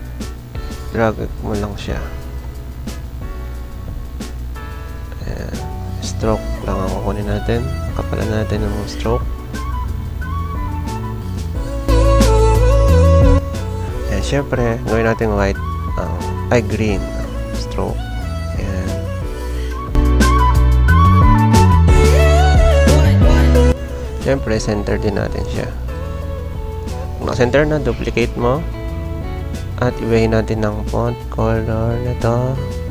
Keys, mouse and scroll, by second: 0.3-1.2 typing, 16.8 click, 18.2 click, 19.8 z, 20.1 click, 21.1 ctrl+a, 21.5 v, 24.2 ctrl+d, 26.6 ctrl+j.